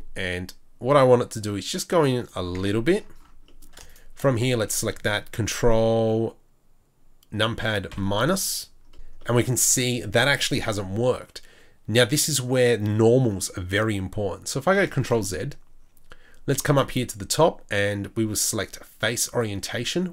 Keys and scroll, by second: 2.6 Tab, 15.1 ctrl+z.